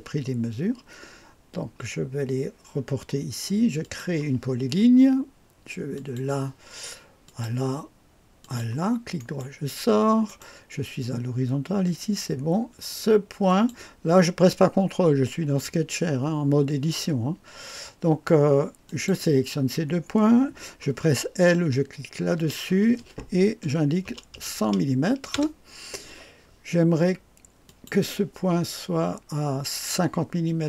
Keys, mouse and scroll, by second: 3.8 click, 6.0 click, 7.3 click, 8.4 click, 9.2 right click, 10.3 right click, 13.5 click, 18.9 click, 23.6 KP_1, 24.0 KP_0, 24.3 KP_0, 25.3 Return, 27.7 click.